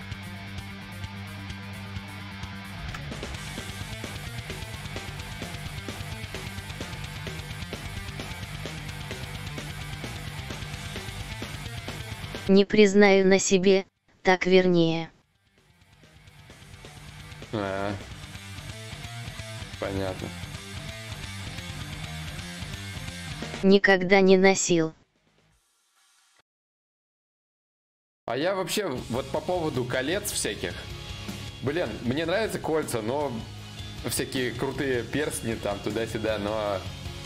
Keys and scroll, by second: 3.0 shift+d, 7.1 ctrl+z, 7.1 ctrl+y.